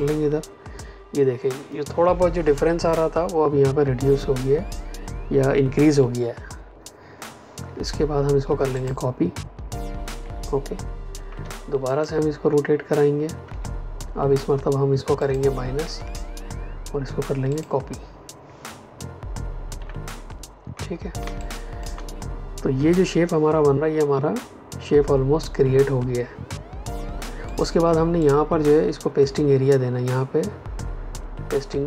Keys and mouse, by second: 8.7 click, 11.8 ctrl+click, 13.4 Return, 15.1 click, 15.9 KP_Subtract, 17.4 click, 19.7 v, 21.1 space, 21.3 click, 21.6 space, 27.4 click.